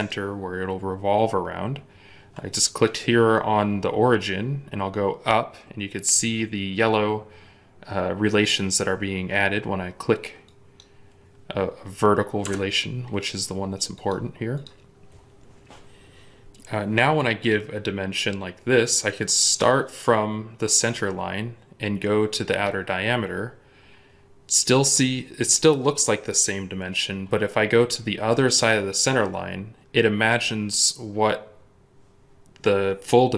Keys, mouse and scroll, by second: 12.3 Escape, 29.6-31.0 scroll up 1.